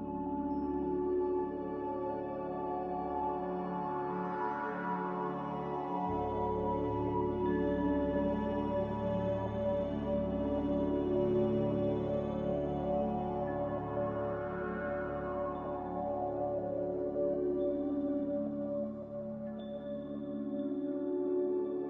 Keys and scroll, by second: 0.4 s, 6.7 z, 10.8 typing.